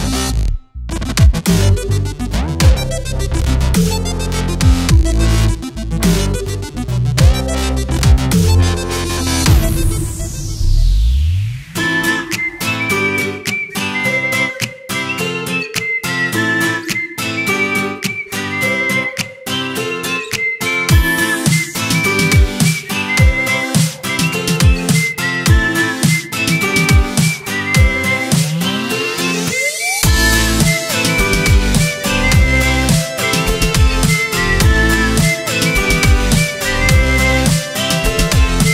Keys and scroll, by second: 2.6-6.4 typing, 8.0 i, 8.9 v, 9.4 i, 10.3 v, 12.2 i, 12.8 v, 13.4 i, 14.4 v, 17.2 i, 18.3 v, 19.4 i, 21.0 ctrl+z, 22.1 v, 25.1-26.9 typing, 30.3-31.7 typing, 33.0 ctrl+Return, 34.8 a, 35.8 ctrl+Return, 36.4 a, 36.8 z, 37.0 space, 37.9 v.